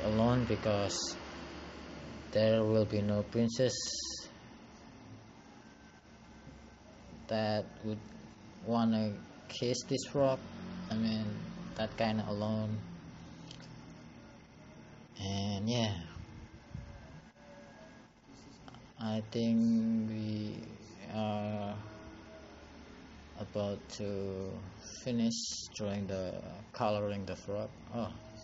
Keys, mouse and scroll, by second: 8.5 click, 10.3 click, 11.4 click, 27.2 click.